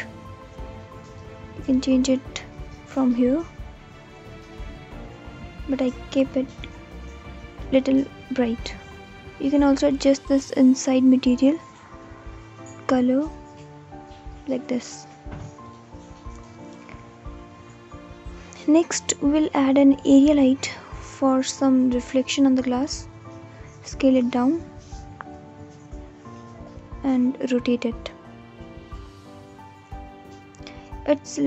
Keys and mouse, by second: 8.5-9.9 drag, 15.8 click, 16.6 shift+a, 22.6 s, 26.1 r, 28.7 alt+middle click.